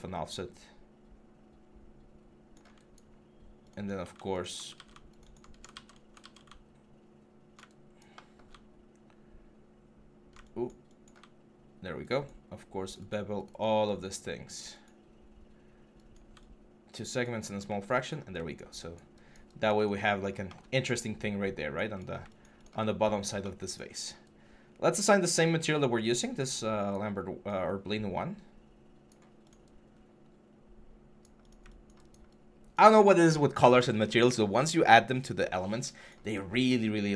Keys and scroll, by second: 4.5 ctrl+z, 5.5 ctrl+z, 6.0 ctrl+z.